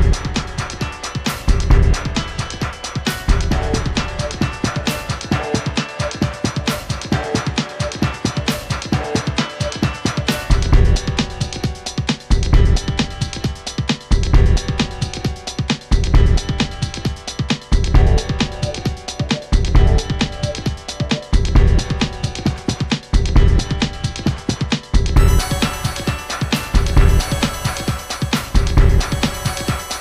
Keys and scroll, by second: 0.9 Right, 5.7 Right, 6.5-7.8 typing, 9.7 typing, 12.2 Up, 12.5 Up, 14.1 typing, 15.4-30.0 Left, 16.2 typing, 26.2 super+c, 27.5 super+d, 27.8 BackSpace, 28.0 BackSpace, 28.1 BackSpace.